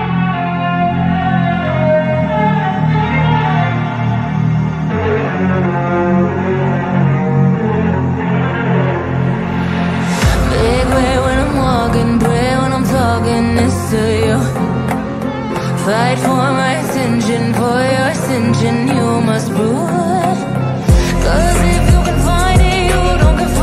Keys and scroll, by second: 7.7 space, 12.6 F3, 13.0 shift+F2, 21.3 F3, 22.8 space.